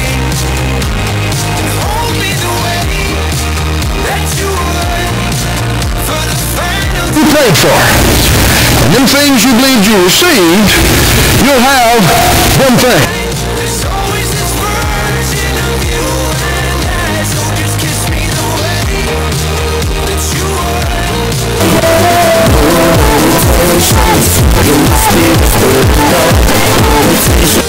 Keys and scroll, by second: 13.4 Page_Down.